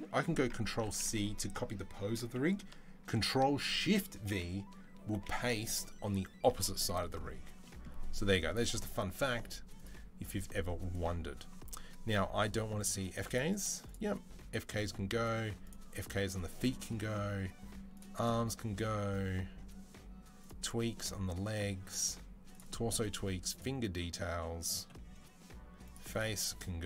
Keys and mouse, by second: 0.6 ctrl+c, 5.0 ctrl+shift+v, 5.3-9.5 ctrl+middle drag, 9.5 click, 9.7-12.6 middle drag, 12.6 click, 12.7 middle click, 13.1 click, 13.2 middle click, 13.3-17.8 drag, 17.8 middle drag, 18.0-20.3 drag, 20.3 middle click, 20.5-23.4 drag, 23.4-25.7 middle drag, 25.7-26.8 drag.